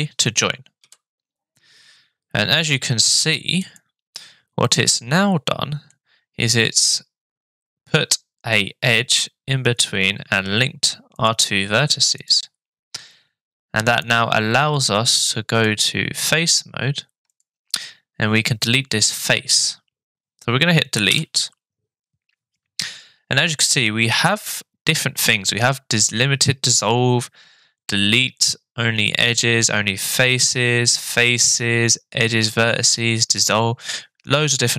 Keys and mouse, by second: 0.8 j, 3.7 click, 4.6-5.9 middle drag, 11.2 click, 12.2 click, 15.6 click, 17.3 click, 21.1 Delete.